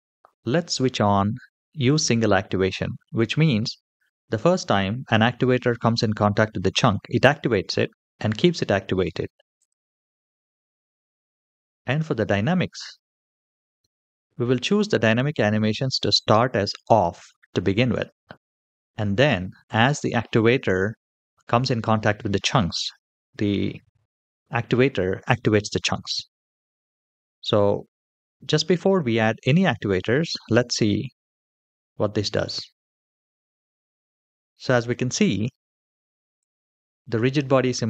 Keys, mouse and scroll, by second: 9.4 click, 31.0 click, 36.2 click, 37.1 click.